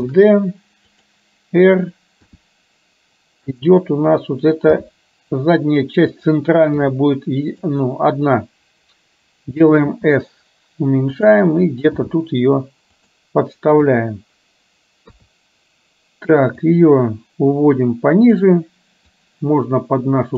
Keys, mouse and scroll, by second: 0.1 shift+d, 2.3 r, 4.8 g, 7.0 r, 12.1 g, 13.8 KP_2, 16.7-18.5 drag, 19.2-20.3 drag.